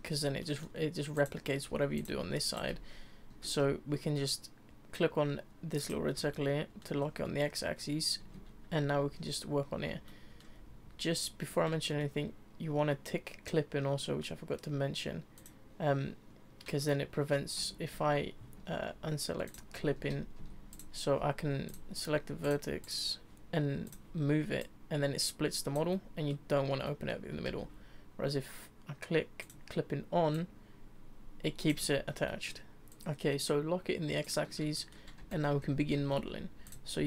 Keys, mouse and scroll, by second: 1.1 click, 1.7 e, 2.1 s, 2.7 ctrl+z, 3.3 ctrl+z, 5.8 click, 6.3 shift+middle click, 7.0 scroll up 2, 7.7-8.2 scroll up 1, 8.2 Tab, 8.8 z, 10.1-10.6 shift+middle drag, 11.8-14.9 shift+middle drag, 15.4 click, 16.8-17.6 middle drag, 17.6 Tab, 17.9 Tab, 18.5 Tab, 19.4 click, 19.8 z, 20.4 Tab, 20.7 click, 21.7 click, 22.4 click, 22.8 click, 23.8 click, 25.9-27.5 middle drag, 27.5 ctrl+z, 29.4 click, 30.3 click, 31.8-32.9 middle drag, 32.9 click, 34.2 click, 34.7 shift+middle click, 35.2 Tab, 35.5 Tab, 36.0 z, 36.7 click.